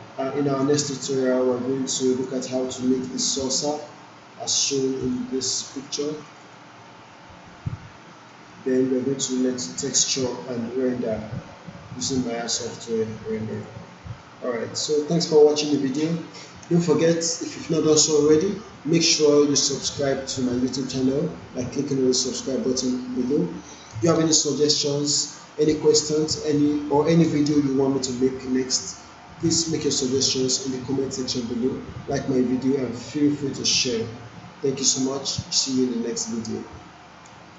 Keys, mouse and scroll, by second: 5.0 click, 12.0 click, 14.2-15.5 alt+drag, 15.7 alt+middle click, 37.5 click.